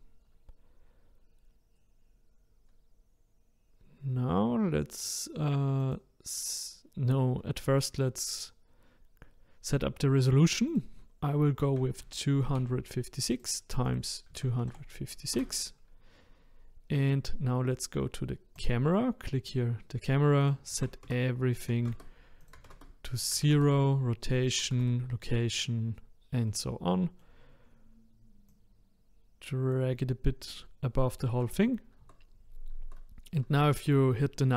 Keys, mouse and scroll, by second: 5.8 click, 10.7-13.4 drag, 13.9-16.9 drag, 18.6 click, 20.4-25.9 drag, 25.9-26.4 scroll down 1, 26.4-27.4 middle drag, 27.4-28.5 scroll down 2, 28.5 click, 30.6-31.3 middle drag, 31.3 KP_0, 32.0 KP_0.